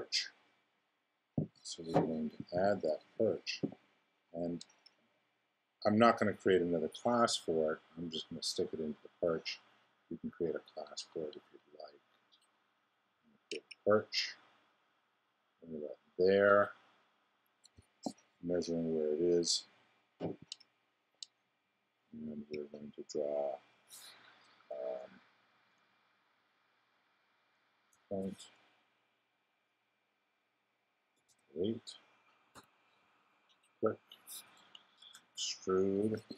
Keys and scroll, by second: 27.9 ., 31.1 0, 31.7 8, 32.5 Return, 35.0 super+e.